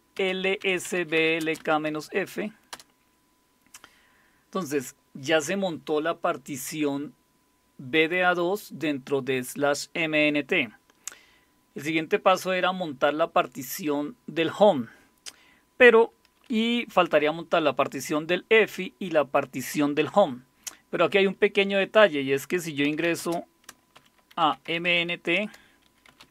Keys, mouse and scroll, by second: 0.0-2.7 typing, 22.6-26.3 typing, 25.3 Return.